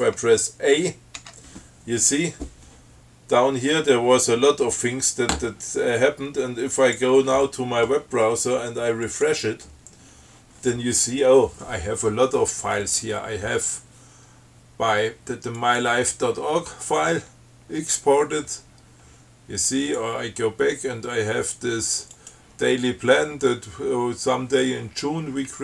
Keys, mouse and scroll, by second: 1.4 a, 7.0 click, 9.3 click, 15.8 click, 17.5-18.9 scroll down 4, 19.0-19.6 scroll up 1, 20.1 click, 22.4 click.